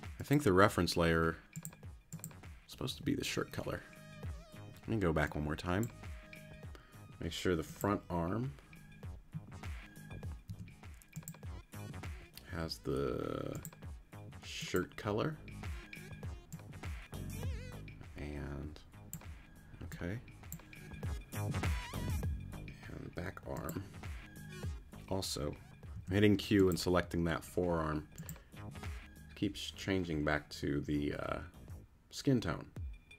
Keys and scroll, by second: 10.5 q, 25.9 q.